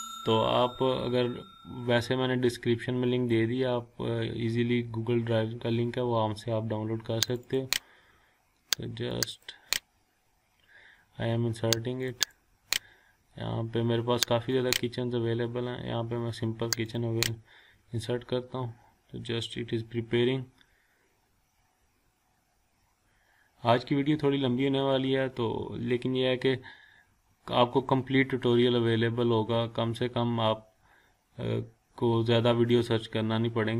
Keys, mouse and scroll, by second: 1.5-3.2 scroll up 1, 4.5-6.5 scroll up 1, 7.2 click, 12.1 click, 14.5 click, 16.9 click.